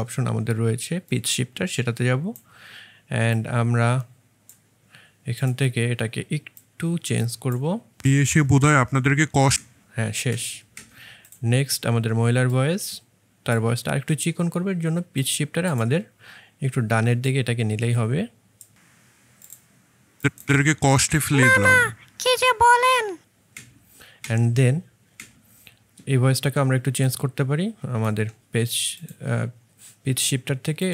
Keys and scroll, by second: 8.0 space, 10.2 space, 10.6 space, 20.4 space, 23.4 space, 24.1 space, 25.0 space.